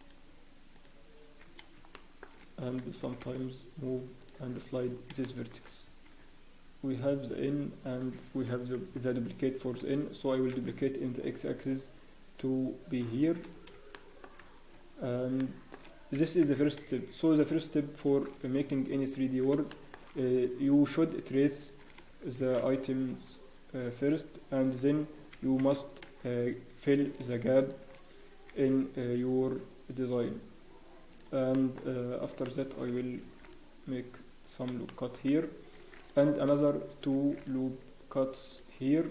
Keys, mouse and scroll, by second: 1.6 scroll up 1, 1.9 shift+middle click, 3.0 g, 4.4-4.8 scroll down 1, 4.8 Tab, 4.8-5.1 scroll down 5, 5.2 shift+middle click, 5.5 scroll down 1, 5.5-6.1 scroll up 2, 5.8 Tab, 6.1-6.6 scroll down 1, 7.4 scroll up 1, 8.6 ctrl+l, 9.4-9.8 scroll down 1, 10.3 scroll up 3, 10.3 shift+d, 13.5 scroll up 1, 13.9 shift+middle click, 14.3 scroll up 5, 15.4 shift+middle click, 16.1 g, 18.3 scroll down 1, 18.9 Tab, 19.7 shift+middle click, 19.7 scroll down 4, 20.0 scroll up 1, 21.1 click, 21.6 shift+click, 22.4 scroll up 3, 22.4 shift+r, 25.3 g, 27.6 shift+click, 28.4 e, 31.5 shift+middle click, 31.8-32.2 scroll up 1, 32.4 shift+middle click, 33.1 ctrl+r, 34.8 shift+middle click, 34.8 scroll up 3, 35.7 ctrl+r.